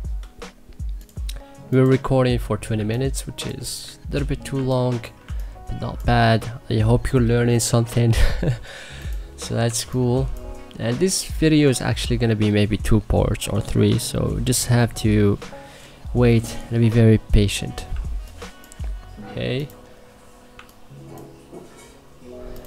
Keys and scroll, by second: 2.6 1, 3.9 ctrl+z, 4.4 1, 5.1 2, 9.5 2, 17.8 1.